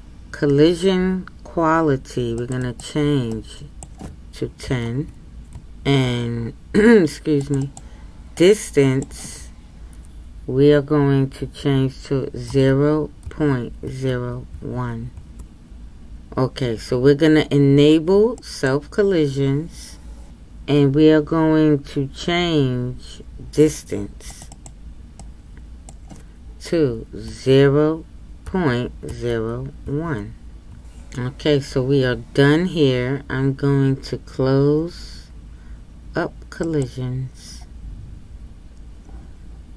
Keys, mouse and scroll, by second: 18.4-30.7 drag.